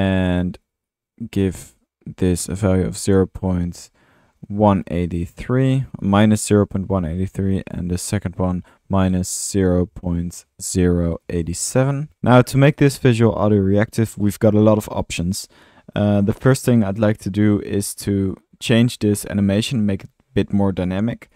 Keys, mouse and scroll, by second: 0.8-1.4 drag, 11.9-12.7 typing, 14.8-15.6 middle drag, 16.1 middle click, 16.2-16.7 drag, 18.2-18.7 drag, 21.0-21.3 drag, 21.2-21.3 typing.